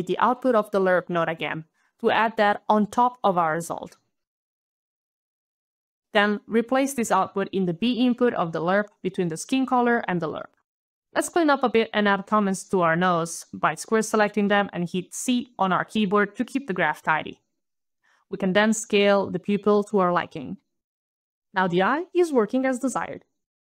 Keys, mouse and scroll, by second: 0.2 alt+right click, 1.7 alt+click, 4.4 alt+click, 4.8 alt+click, 5.4 alt+right click, 5.5 alt+click, 5.6 alt+click, 5.6 alt+c, 5.8 alt+shift+p, 5.8 alt+u, 5.8 alt+i, 5.8 alt+l, 5.8 alt+space, 5.8 alt+o, 5.9 alt+shift+e, 5.9 alt+y, 6.1 alt+Return, 6.4 alt+click, 6.9 alt+scroll down 1, 8.3 alt+click, 8.3 alt+middle click, 10.6 alt+click, 11.0 alt+click, 11.1 alt+click, 12.2 alt+c, 12.8 alt+shift+p, 12.8 alt+right click, 12.9 alt+u, 13.0 alt+i, 13.1 alt+l, 13.2 alt+Return, 13.9 alt+click, 14.8 alt+click, 15.8 alt+right click, 16.2 alt+scroll down 3, 16.9 alt+right click, 17.5 alt+scroll, 17.6 alt+click, 18.9 alt+click, 19.0 alt+click, 19.6 alt+shift+KP_Decimal, 20.0 alt+KP_7, 20.3 alt+KP_Enter, 20.9 alt+click, 21.0 alt+click, 21.2 alt+KP_Decimal, 21.2 alt+click, 21.2 alt+KP_7, 21.3 alt+KP_Enter, 22.2 alt+KP_Decimal, 23.3 alt+click.